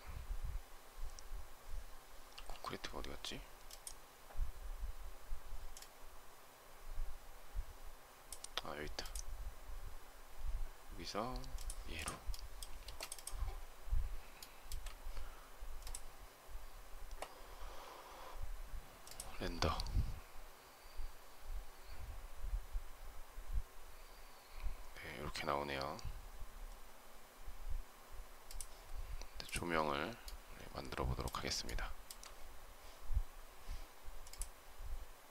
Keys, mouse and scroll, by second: 12.7 space, 14.3 shift+middle click, 31.5 shift+middle click.